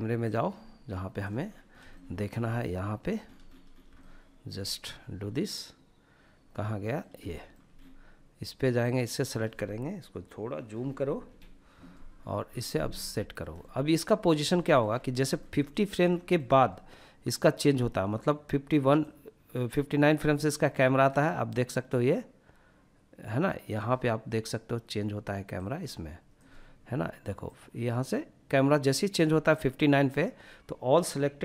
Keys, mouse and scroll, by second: 0.4-0.8 scroll down 3, 0.9 shift+middle click, 1.4-2.2 middle drag, 2.2-2.7 scroll up 2, 3.0 shift+middle click, 3.0-3.5 scroll up 1, 4.3-6.0 middle drag, 6.2-6.7 shift+middle drag, 6.7-7.4 scroll up 2, 7.8 click, 10.3 KP_Decimal, 11.1-11.4 scroll down 2, 12.1 shift+middle drag, 12.1 scroll down 3, 12.6-13.2 middle drag, 13.4 scroll up 1, 13.6 shift+middle click, 13.9-14.3 shift+middle drag, 14.7-15.6 middle drag, 16.6 click, 20.5-22.7 drag, 24.5 click, 26.5 click.